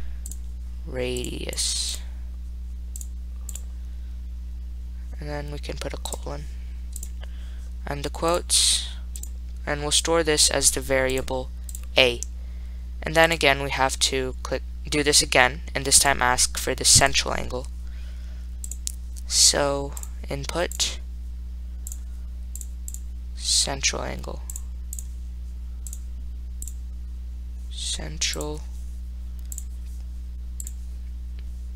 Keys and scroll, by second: 0.6 *, 3.2 5, 6.3 ., 9.4 ,, 13.5 Return, 17.2 Right, 18.9 1, 25.2 4, 28.6 ), 29.8 0.